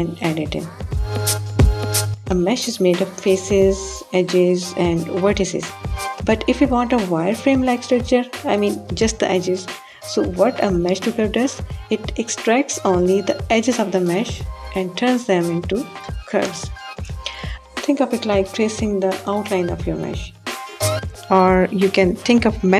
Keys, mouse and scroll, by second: 2.3-5.0 drag, 5.1 click, 7.6-9.6 middle drag.